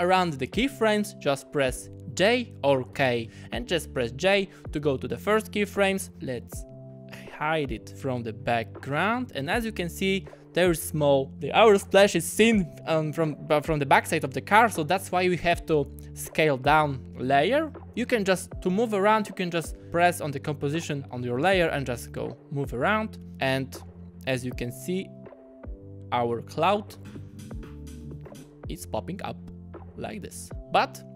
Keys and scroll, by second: 2.2 j, 2.9 k, 23.2 super+z, 26.9 space, 28.3 space.